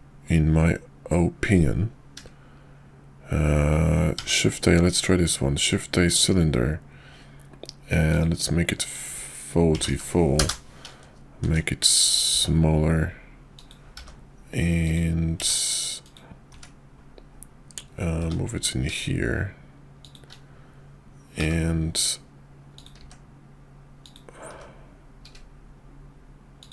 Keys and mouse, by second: 4.1 shift+a, 8.8-10.5 drag, 9.8 4, 11.4 s, 12.3 s, 13.9 g, 16.5 `, 18.2 g, 21.4 g, 22.9 s, 24.5 g.